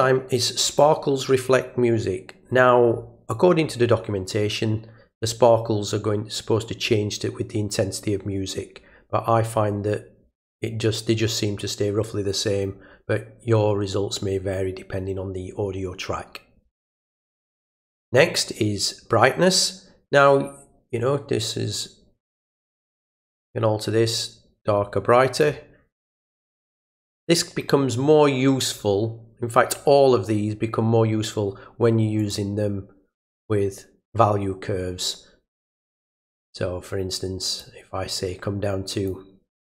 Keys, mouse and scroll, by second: 0.6 click, 17.5 click, 19.5-25.4 drag, 32.2 click, 35.9 click, 37.6 click.